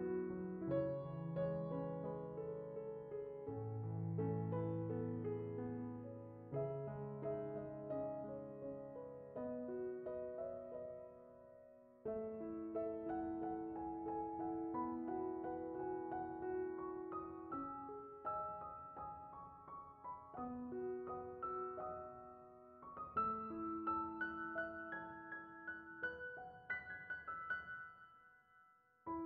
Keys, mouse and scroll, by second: 7.6 ctrl+shift+click, 8.8-9.8 drag, 14.5-16.3 drag, 16.7 shift+click, 18.4-19.7 drag, 21.4-22.5 middle drag, 25.6 click, 27.2 click.